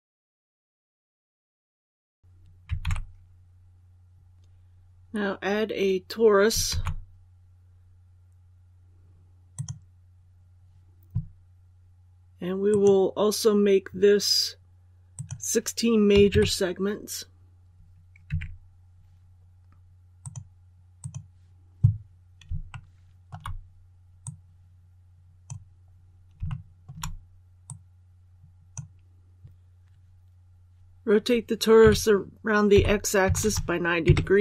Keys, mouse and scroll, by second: 0.6 shift+scroll up 1, 2.7 alt+a, 6.6 shift+a, 9.4 click, 16.0 KP_1, 18.2 Tab, 20.1-21.9 drag, 22.6 shift+middle click, 24.1 click, 25.8 scroll down 1, 26.4 shift+middle click, 27.6-28.9 drag, 31.7-33.2 typing.